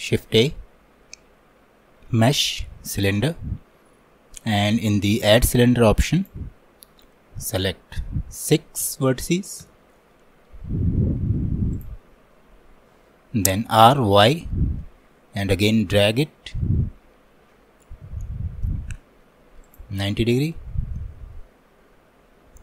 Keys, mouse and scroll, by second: 0.2 shift+a, 6.2-22.6 drag.